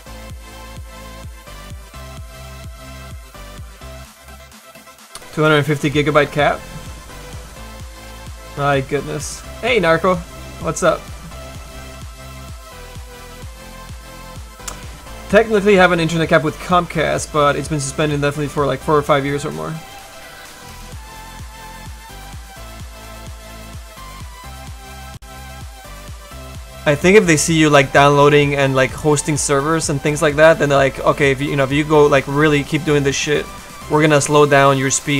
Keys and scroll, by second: 26.1 s, 29.3 s, 32.1 s.